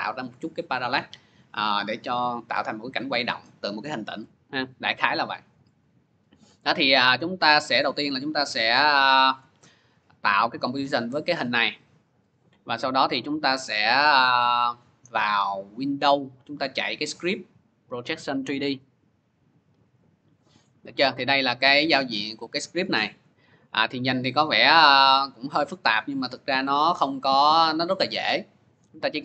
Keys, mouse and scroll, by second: 5.6 click, 7.7 click, 9.2 click, 9.7 click, 11.4 click, 15.7 click, 18.6 click, 20.2 click, 21.9 click, 23.1 click, 24.9 click.